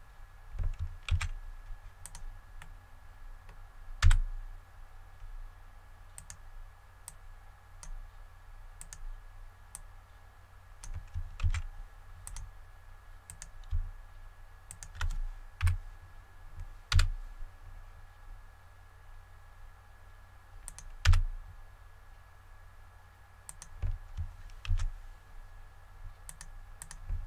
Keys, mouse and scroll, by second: 1.0 Tab, 1.9 click, 2.5 middle click, 3.9 a, 6.0 right click, 6.9-8.5 drag, 8.7 right click, 9.6 click, 11.3 Tab, 12.1 click, 13.2 right click, 14.5 shift+right click, 15.5 KP_1, 16.8 e, 20.5 click, 23.4 click, 24.5 ctrl+r, 25.1-26.1 scroll up 1, 26.1 click.